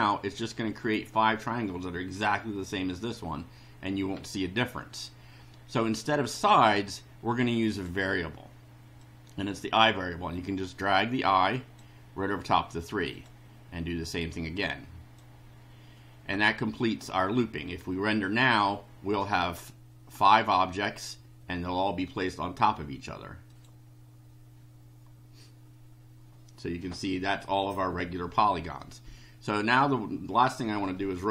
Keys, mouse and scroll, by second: 7.7 click, 9.0-11.9 drag, 13.1 click, 14.1-15.3 drag, 23.5 click.